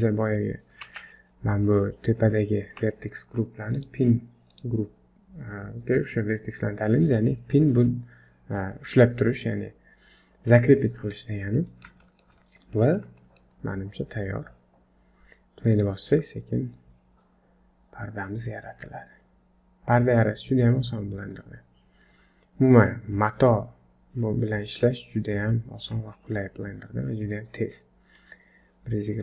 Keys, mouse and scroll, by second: 0.9 Tab, 0.9-1.3 scroll down 2, 2.7 Tab, 3.7 click, 11.6 middle click, 12.1 shift+middle click, 12.4-12.9 scroll down 3, 12.8 middle click, 13.2 shift+middle click, 13.6-14.7 scroll up 1, 14.7-15.1 scroll up 1, 15.7 click.